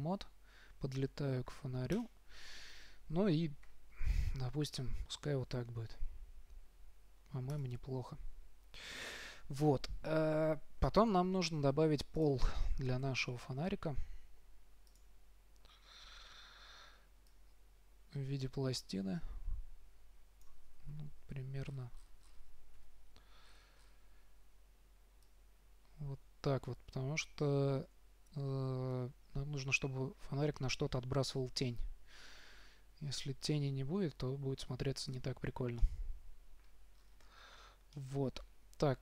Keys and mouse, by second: 3.9 g, 12.5-14.2 drag, 13.3 shift+a, 17.6-19.4 drag, 21.2 KP_3, 23.1 KP_5, 25.6-31.5 drag, 36.3-37.8 middle drag.